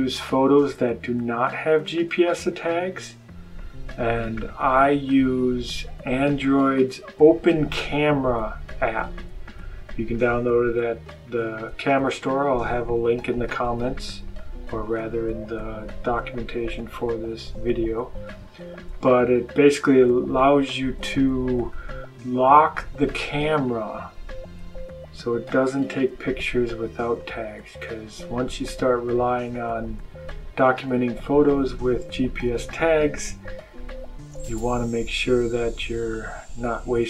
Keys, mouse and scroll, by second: 0.5 click, 6.6 click, 10.0-14.8 drag, 18.8 click, 20.4 click, 20.7-21.8 scroll up 1, 21.8-22.8 scroll up 1, 25.4 click, 27.1 click, 29.4 click, 30.7 click.